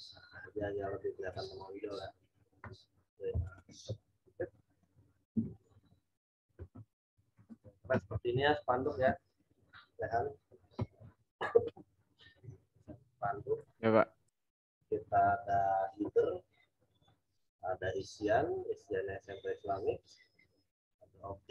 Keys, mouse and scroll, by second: 1.3 click, 2.7 z, 3.4 click, 7.1 z, 7.5 alt+click.